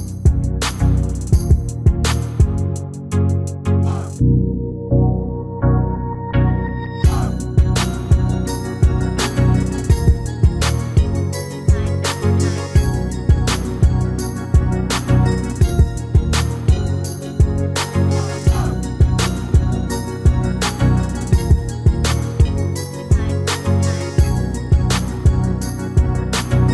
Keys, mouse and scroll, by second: 8.1-10.0 right drag, 9.4 ctrl+z, 11.8 ctrl+shift+z, 13.4 ctrl+shift+z, 13.4-15.5 middle drag, 15.6 shift+r, 18.5 ctrl+r, 22.3 ctrl+r, 25.5 ctrl+r.